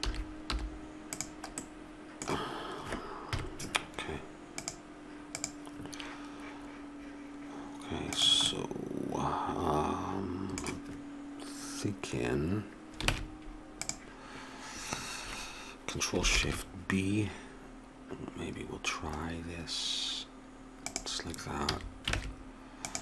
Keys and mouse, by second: 0.0 s, 3.3 KP_Decimal, 13.1 ctrl+Tab, 21.6 a, 22.1 ctrl+Tab.